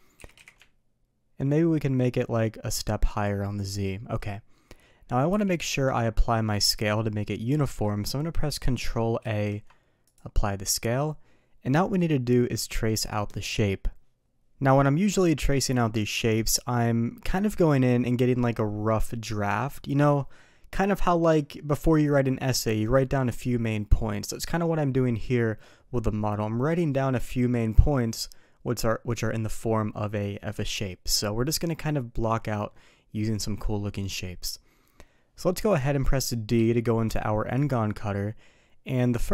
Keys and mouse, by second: 0.2 s, 5.3 n, 9.2 ctrl+a, 35.7 click, 36.5 d.